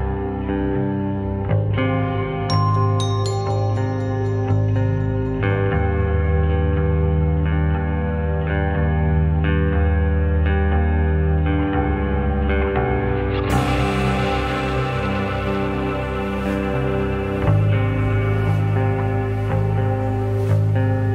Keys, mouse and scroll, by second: 0.0 click, 0.6 click, 4.5 shift+a, 6.1 s, 6.7 s, 13.2-14.3 drag, 14.7-15.7 middle drag, 16.4-17.5 shift+middle drag, 18.7 click, 19.8 click.